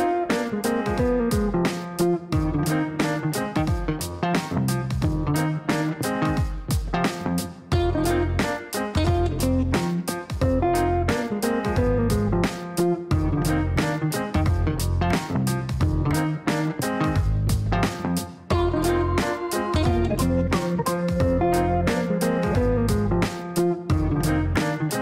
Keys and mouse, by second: 3.2 click, 5.9 click, 8.8 click, 11.9 click, 12.7 click, 13.8-14.7 typing, 15.9-16.8 typing, 17.2 Down, 17.4 Down, 17.5 Down, 17.8 Down, 18.0 Down, 18.2 Down, 18.7 Return, 19.3 Return, 21.2 click, 22.4 click, 23.6 click, 24.7 click.